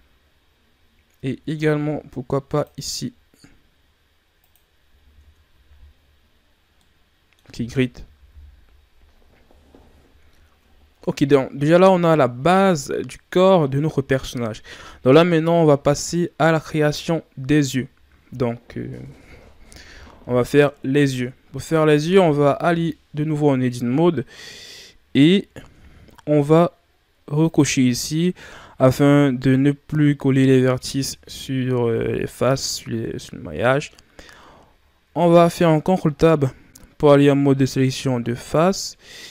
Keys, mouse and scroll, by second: 1.5 ctrl+r, 5.1 Tab, 5.6-6.7 scroll down 4, 6.7-8.2 middle drag, 8.2 KP_1, 9.2-10.4 scroll down 11, 11.0-14.2 scroll up 2, 21.6-22.6 scroll up 2, 22.6 Tab, 23.9 Tab, 25.3 shift+scroll up 1, 27.4 click, 33.3-35.1 shift+scroll up 4, 35.3 ctrl+Tab.